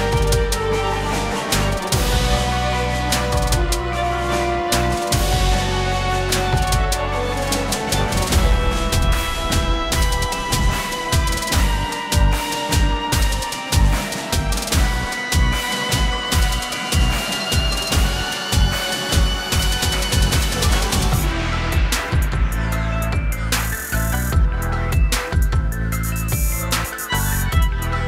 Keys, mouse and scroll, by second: 1.9 click, 6.8 F9, 8.6 shift+click, 11.1 click, 13.1 ctrl+=, 13.3 space, 13.4 c, 13.7 click, 17.6 space, 17.8 click, 18.2 ctrl+=, 18.6 click, 18.9 a, 19.4 click, 23.9 click, 24.2 v, 24.2 space, 24.3 click, 24.8 space, 24.9 click, 26.7 typing, 27.6 click.